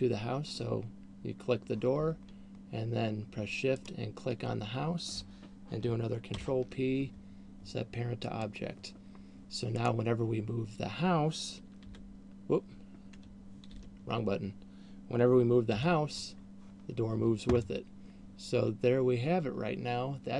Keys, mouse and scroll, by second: 4.3 shift+right click, 6.6 ctrl+p, 10.3 right click, 12.3 h, 14.3 alt+h, 16.1 g, 18.1 middle click.